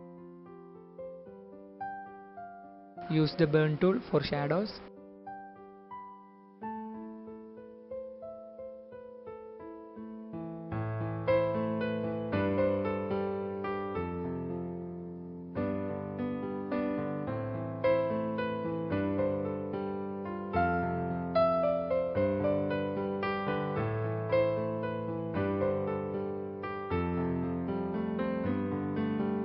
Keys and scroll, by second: 9.2 typing, 10.7-12.1 typing, 14.9-16.0 typing, 19.3-20.3 typing, 22.6-23.9 typing, 25.1 space, 25.9 space, 26.2 space, 27.3 space, 28.0 space, 29.2-29.4 typing.